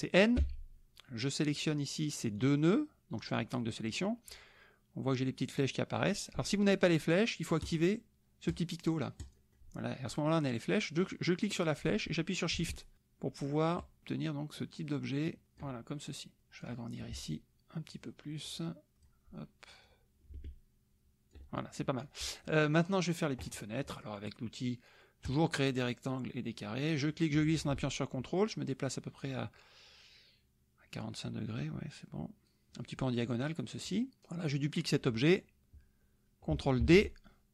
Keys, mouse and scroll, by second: 0.4 n, 2.4-4.0 drag, 7.6 click, 8.5 click, 9.2 click, 11.0-15.8 drag, 16.4 click, 17.9-19.2 shift+drag, 19.9-21.5 drag, 25.2 click, 26.8-34.2 drag, 36.8 ctrl+d.